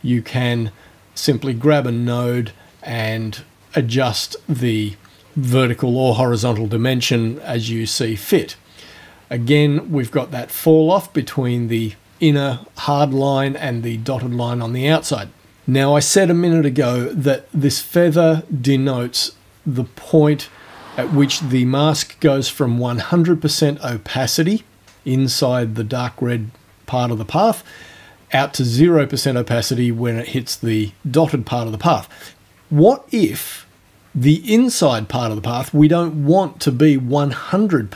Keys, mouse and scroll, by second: 3.5-5.7 drag.